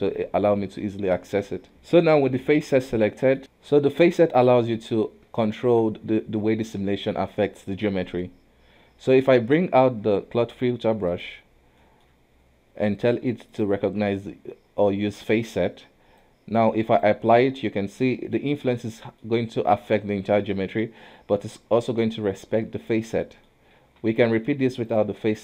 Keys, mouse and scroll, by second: 1.0 q, 1.7-3.4 middle drag, 4.6-7.3 middle drag, 7.3-8.3 scroll up 1, 8.3-9.8 scroll down 1, 9.8 space, 11.9-13.6 middle drag, 13.6 click, 16.3 click, 17.5-19.3 middle drag, 19.3 scroll up 2, 19.8-21.9 middle drag, 21.9-22.6 scroll down 1, 22.6-23.9 middle drag, 23.9 ctrl+z, 25.0 click.